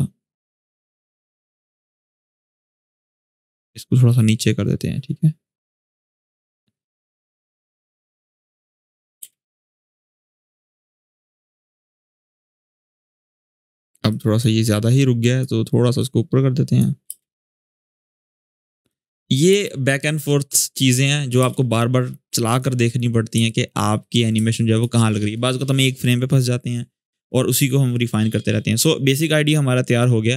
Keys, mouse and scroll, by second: 2.5-3.1 click, 8.5 ctrl+z, 9.0 space, 13.8-15.2 drag, 16.8 space, 18.6-19.2 click, 19.2 space, 21.1 space, 22.2 click, 23.2 alt+scroll down 1, 23.7-24.7 drag.